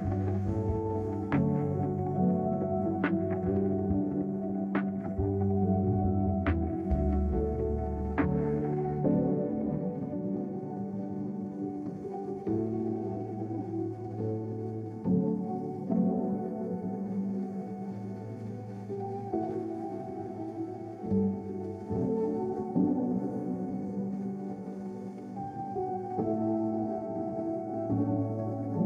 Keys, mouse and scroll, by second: 2.5-4.1 drag, 9.4 click, 10.5 click, 12.0 click, 13.0 1, 13.4 0, 14.6 Return, 16.4 click, 16.9 right click, 17.6-18.7 drag, 19.4 click, 25.7-26.9 drag, 27.8-28.4 scroll down 2, 28.7 middle click.